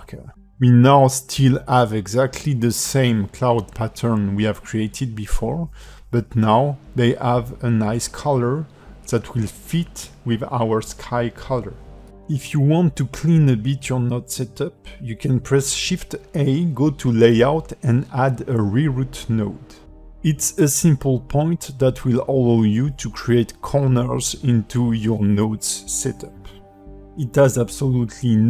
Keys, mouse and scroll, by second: 2.3 scroll down 2, 2.5 alt+middle click, 3.5 ", 3.7 ctrl+space, 3.9 scroll down 2, 4.2 shift+middle click, 4.5 middle click, 8.6 ctrl+space, 9.9 click, 12.5 click, 13.1 shift+a, 16.7 g, 17.4 g, 19.9 shift+d, 21.2 g, 23.7 click, 23.9 g, 24.7 scroll down 2, 25.0 shift+middle click, 25.7 click, 25.9 g, 27.9 click.